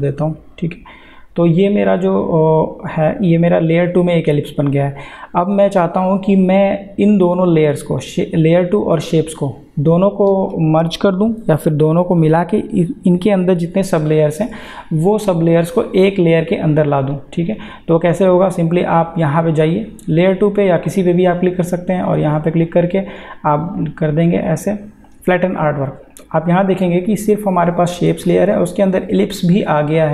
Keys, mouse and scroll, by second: 9.1 click, 18.5 click, 25.3 click.